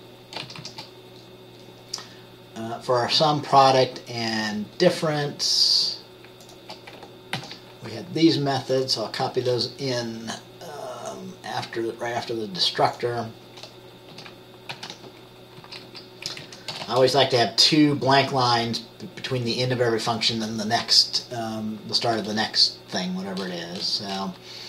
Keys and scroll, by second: 0.5 shift+Down, 0.7 shift+Down, 7.5 ctrl+c, 14.3 Return, 14.8 ctrl+v, 15.7 Down, 16.0 Down, 16.4 Up, 16.6 Up, 16.8 Return, 16.9 Return.